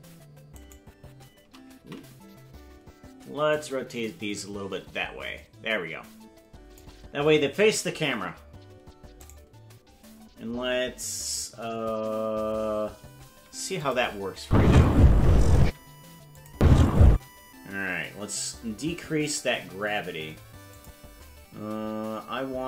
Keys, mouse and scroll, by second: 0.7 right click, 2.3 ctrl+z, 3.5-6.8 drag, 9.3 right click, 13.9 click, 14.4 space, 15.6 space, 16.3 click, 16.5 space, 17.1 space, 20.7 click.